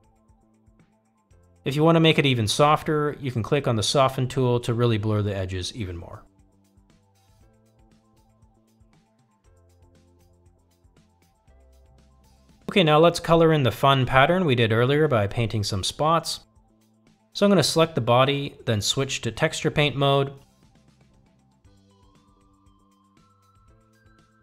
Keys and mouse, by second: 2.8 click, 3.5 f, 4.3-5.8 drag, 6.1-7.2 drag, 7.5-8.7 drag, 9.2-10.3 drag, 11.2-12.0 drag, 12.2 middle click, 18.6-19.2 drag, 19.7 click, 22.0 click.